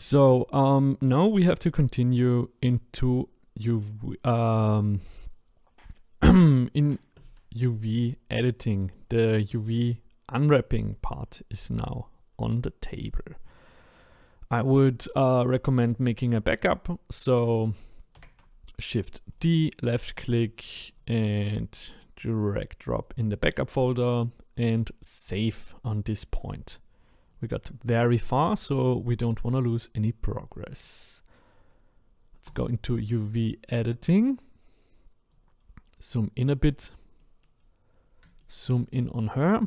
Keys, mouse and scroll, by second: 15.5-15.8 scroll down 1, 15.8-18.1 middle drag, 18.1 shift+d, 20.7 click, 20.9 click, 22.4 click, 24.5-27.4 drag, 30.7 click, 32.5-37.2 drag, 37.2 middle click, 37.5-38.4 scroll up 10, 38.4 shift+middle click, 39.0-39.6 scroll up 1.